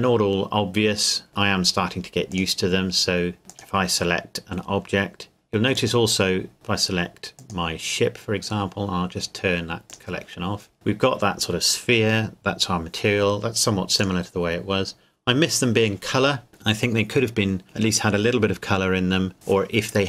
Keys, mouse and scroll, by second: 2.3 click, 3.5 click, 7.4 click, 14.0 click.